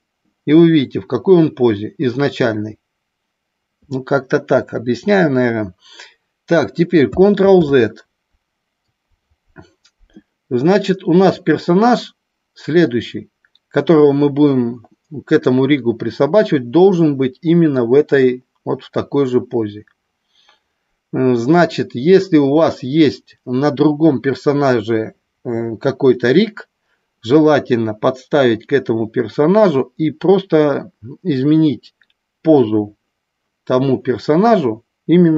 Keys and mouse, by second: 7.6 ctrl+z.